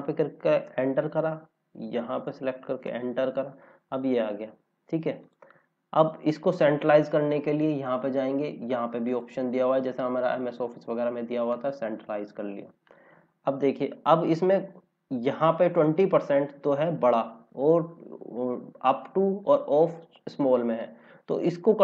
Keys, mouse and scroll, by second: 2.0 click, 3.7 scroll down 1, 5.2 click, 5.7 scroll up 1, 7.0 click, 13.1 scroll down 1, 15.2 scroll up 1, 19.6 scroll down 1, 20.7 scroll down 1, 21.6-21.8 scroll up 1.